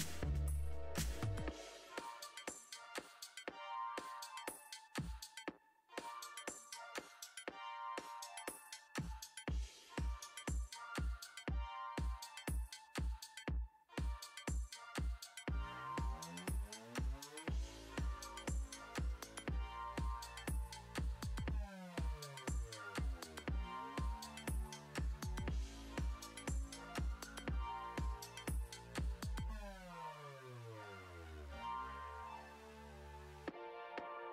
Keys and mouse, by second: 0.9 click, 3.6-6.1 typing, 6.8 KP_Enter, 20.3 r, 23.1 x, 24.1 y, 31.4 click.